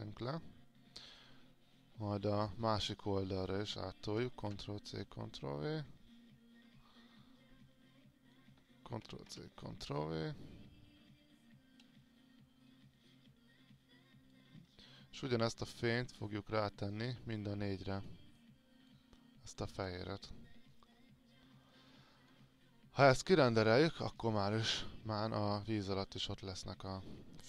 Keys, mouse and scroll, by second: 2.8 alt+click, 4.1 ctrl+c, 4.5 ctrl+v, 9.1 ctrl+c, 10.4-17.4 drag, 17.6 ctrl+click, 18.6 ctrl+click, 19.4 ctrl+click, 21.9 alt+click, 23.4 click, 24.2-25.2 scroll up 1, 25.5 click, 26.0 alt+click.